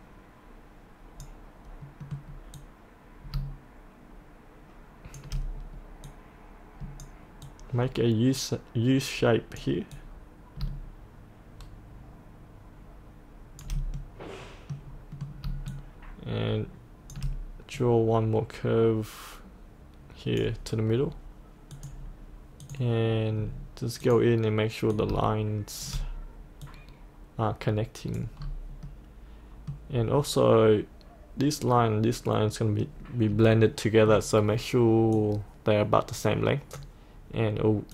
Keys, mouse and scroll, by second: 2.0 middle click, 2.6-5.2 drag, 6.1-13.6 drag, 14.0 middle click, 15.7 shift+click, 17.8-22.7 drag, 23.4-24.1 scroll down 1, 24.1 click, 26.6-28.4 drag, 28.4-28.9 scroll up 1, 28.9 middle click, 29.9-35.2 scroll down 1, 35.2-37.9 drag.